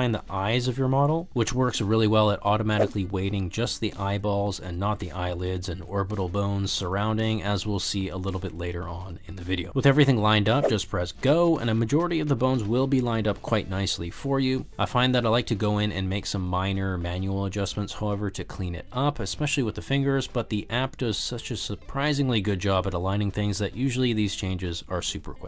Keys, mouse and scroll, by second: 0.0-1.2 typing, 0.5 click, 1.0 click, 3.8-9.8 drag, 11.4-15.0 drag, 16.1 shift+middle click, 16.9 shift+middle drag, 17.0 middle click, 17.3 ctrl+middle click, 17.4 shift+middle drag, 17.6-17.9 middle drag, 18.0 shift+middle click, 18.2 shift+middle click, 18.4 middle click, 18.9 KP_3, 19.0 shift+middle click, 19.3 shift+middle click, 19.7 g, 20.0 click, 20.1 g, 21.1 shift+middle click, 21.6 shift+middle click, 21.9 g, 22.0 z, 22.2 click, 22.6 shift+middle click, 22.7 shift+middle click, 23.0 shift+middle click, 23.6 shift+middle click, 23.7 click, 23.9 g, 24.1 click, 24.2 click, 24.3 g, 24.5 click, 24.7 g, 25.4 click.